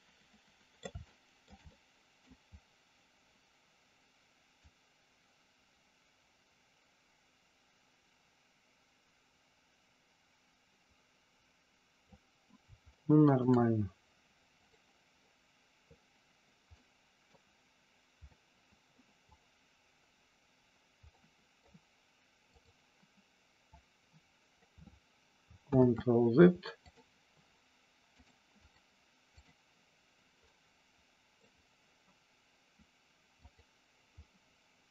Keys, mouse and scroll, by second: 1.0 scroll up 1, 1.1 shift+middle click, 1.6 middle click, 4.6-12.0 drag, 12.9 scroll up 1, 13.0 shift+middle click, 14.6 click, 16.8 middle click, 18.2 scroll up 1, 18.4 middle click, 19.4 click, 21.0 middle click, 22.4 click, 23.6-24.6 drag, 25.6 ctrl+z, 26.8 click, 28.6 click, 30.6 middle click, 33.4 click.